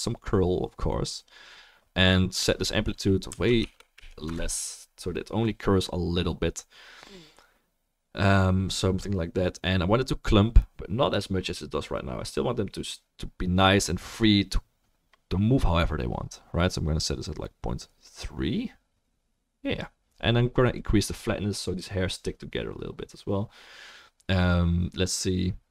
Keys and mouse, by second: 15.1-25.7 drag, 15.1-23.8 middle drag, 15.1-23.8 right drag.